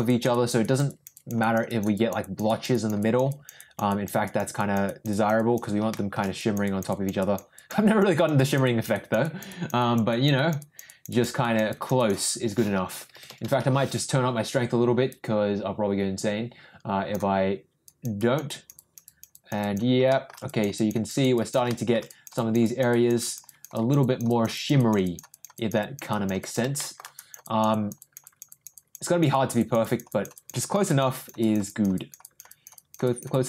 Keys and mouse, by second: 0.1 click, 0.3 click, 0.6 click, 0.9 click, 1.1 click, 1.4 click, 1.7 click, 1.9 click, 2.2 click, 2.5 click, 2.7 click, 3.0 click, 3.3 click, 3.6 click, 3.9 click, 4.2 click, 4.6 click, 4.8 click, 5.1 click, 5.4 click, 5.9 shift+middle click, 6.3 click, 6.6 click, 6.9 click, 7.2 click, 7.5 click, 7.8 click, 8.1 click, 8.3 click, 8.6 click, 8.9 click, 9.2 click, 9.4 click, 9.8 click, 10.1 click, 10.3 click, 10.6 click, 10.8 click, 11.1 click, 11.4 click, 11.7 click, 12.0 click, 13.0-13.6 typing, 15.1-17.1 drag, 17.8 click, 18.2 click, 18.5 click, 18.7 click, 19.0 click, 19.3 click, 19.6 click, 20.1 shift+middle click, 20.4 click, 20.7 click, 21.1 click, 21.3 click, 21.7 shift+middle click, 22.1 click, 22.3 click, 22.6 click, 22.9 click, 23.2 click, 23.4 click, 23.7 click, 24.0 click, 24.3 click, 24.5 click, 24.8 click, 25.0 click, 25.3 click, 25.5 click, 25.8 click, 26.1 click, 26.4 click, 26.7 shift+middle click, 27.1 click, 27.4 click, 27.7 click, 28.0 click, 28.2 click, 28.5 click, 28.7 click, 29.0 click, 29.3 click, 29.6 click, 29.8 click, 30.1 click, 30.3 click, 30.6 click, 30.8 click, 31.1 click, 31.4 click, 31.6 click, 31.9 click, 32.2 click, 32.5 click, 32.7 click, 33.0 click, 33.3 click.